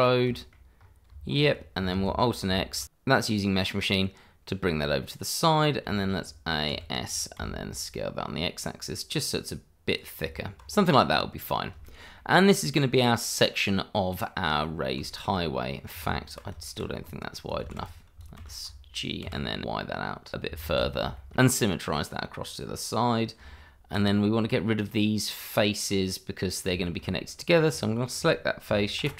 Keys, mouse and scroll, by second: 0.8 scroll up 1, 1.1 Tab, 1.9 alt+x, 2.5 shift+middle click, 3.3 middle click, 5.0 middle click, 5.8 a, 6.7 s, 7.4 x, 9.9 click, 10.2 Tab, 11.0 middle click, 12.1 middle click, 14.6 scroll down 1, 15.1 shift+middle click, 15.5 middle click, 16.0 Tab, 16.6 shift+middle click, 17.2 click, 17.6 shift+z, 17.8 click, 18.4 shift+z, 19.2 g, 19.6 y, 20.3 click, 20.6 alt+x, 21.1 shift+middle click, 22.3 middle click, 22.7 scroll up 1, 23.0 middle click, 23.5 Tab, 24.3 scroll up 1, 24.5 middle click, 26.0 middle click, 26.9 middle click, 27.1-27.5 scroll up 1, 27.5 click, 27.7 middle click, 29.0 shift+g.